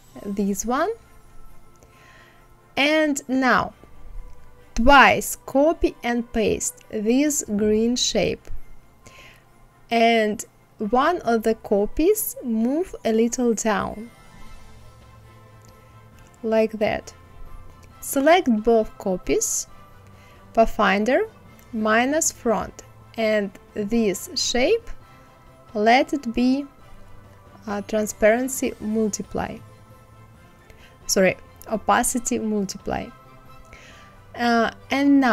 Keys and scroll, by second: 8.6 ctrl+c, 9.2 ctrl+f, 9.8 ctrl+c, 10.5 ctrl+f.